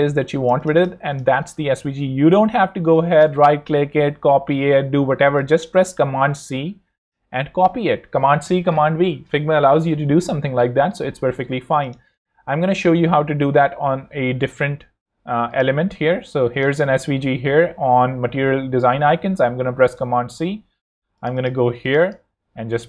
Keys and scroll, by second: 0.1 z, 1.4 space, 1.8 super+Tab, 4.8 Escape, 13.1 shift+super+c, 19.3 super+c, 19.9 super+Tab.